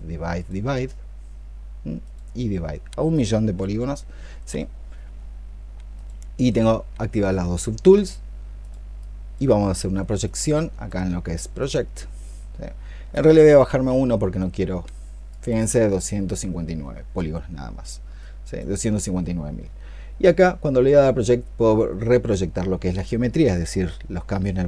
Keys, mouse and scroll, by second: 8.8 double click, 13.5 ctrl+z.